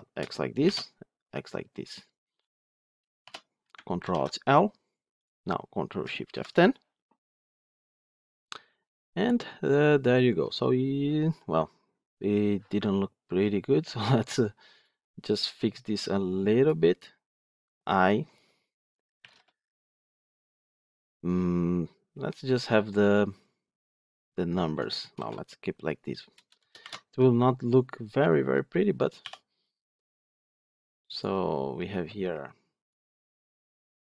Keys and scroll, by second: 1.5 Escape, 3.9 ctrl+alt+l, 6.2 ctrl+shift+F10.